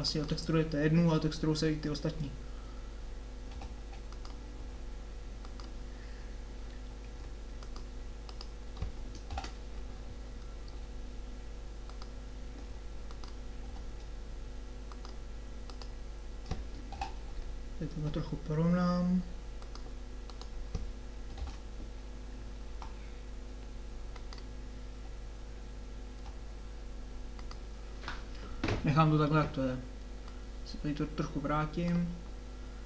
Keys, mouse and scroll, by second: 3.5 g, 4.7 s, 7.1 s, 8.2-9.3 drag, 9.3 ctrl+l, 10.7 s, 12.6 s, 13.6 g, 15.7-18.0 drag, 17.0 ctrl+l, 18.0 g, 20.3-21.4 drag, 21.4 ctrl+l, 22.9 r, 26.1 g, 30.4 click, 30.6 click, 30.8 click.